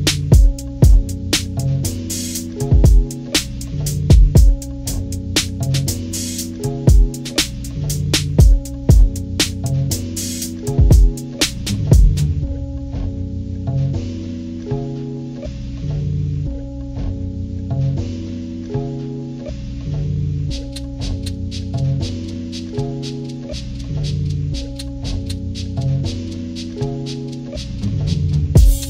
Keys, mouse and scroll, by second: 1.5 ctrl+-, 2.1 ctrl+=, 2.8 ctrl+=, 3.0-3.6 ctrl+scroll up 4, 5.4-10.5 drag, 10.9 click, 11.5 ctrl+-, 12.0 ctrl+-, 12.2 ctrl+-, 12.4 ctrl+-, 12.7-14.9 drag, 15.7-16.9 drag, 18.7 click, 19.3 click, 20.5-22.3 drag, 24.1 click, 25.1-26.4 drag, 26.9 click, 28.5 click.